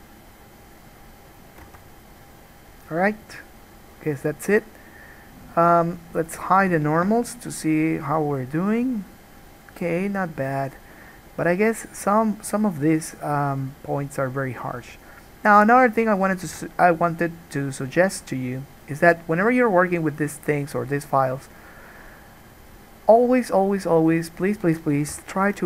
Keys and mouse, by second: 1.9 alt+a, 16.7 ctrl+z, 21.3-25.5 middle drag, 25.3 3, 25.5 shift+click.